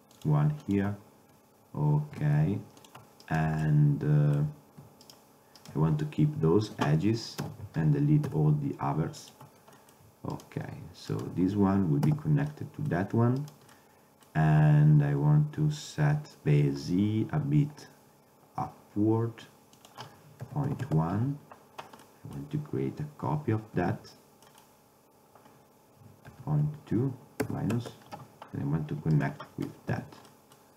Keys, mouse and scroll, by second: 0.3-2.3 drag, 2.3 ctrl+Tab, 3.3-5.1 middle drag, 7.5 ctrl+i, 8.4 x, 9.9-10.9 drag, 11.7 click, 12.2 f, 19.9-22.1 drag, 22.1-23.9 middle drag, 23.9 shift+d, 29.3-30.7 drag, 30.0 f.